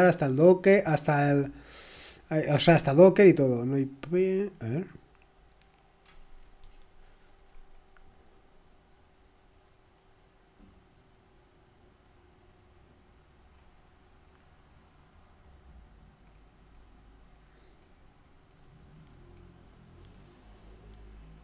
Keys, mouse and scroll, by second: 1.1-1.5 scroll down 1, 1.7-2.3 scroll up 1, 2.9-4.0 scroll down 4, 4.1-4.5 scroll down 2, 4.5-6.3 scroll up 3, 7.5-8.7 scroll down 2, 8.7-9.6 scroll down 1, 10.0-12.0 scroll up 2, 12.0-13.0 scroll up 1, 13.2-14.7 scroll up 2, 15.6-16.2 scroll up 1, 16.2-17.8 scroll down 2, 17.8-18.4 scroll down 1, 18.5-19.3 scroll down 2, 19.3-19.7 scroll down 1, 19.9-20.6 scroll down 2, 20.6-21.3 scroll down 1, 21.3-21.4 scroll down 1.